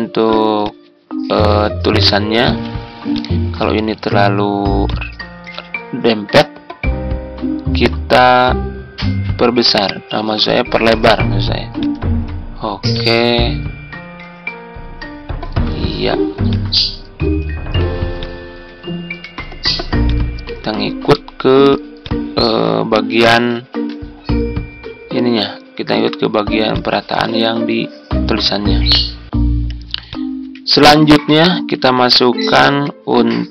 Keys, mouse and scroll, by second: 2.3 ctrl+g, 23.6 ctrl+g, 31.0 Tab, 31.7 Tab, 32.9 Tab.